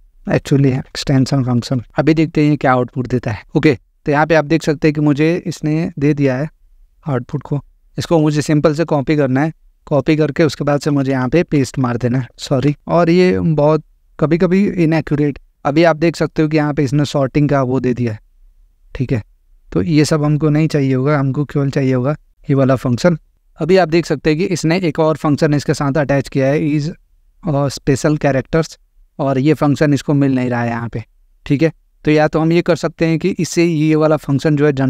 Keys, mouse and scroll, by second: 0.5-2.1 typing, 7.3 click, 9.9 click, 10.9 Return, 11.1 Return, 11.3 ctrl+v, 12.5 ctrl+z, 12.8 click, 18.5 click, 20.9 click, 22.9 click, 28.7 click, 31.0 click.